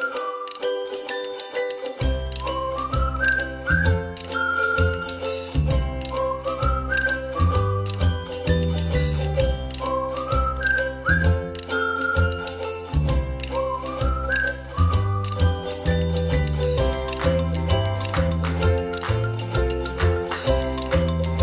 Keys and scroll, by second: 2.3 ctrl+d, 5.4 Up, 5.7 Up, 5.9 Up, 6.3 Down, 9.5 Up, 11.6 Up, 11.8 Up, 12.0 Up, 12.2 Up, 12.6 Down, 13.0 Delete, 15.3 ctrl+d.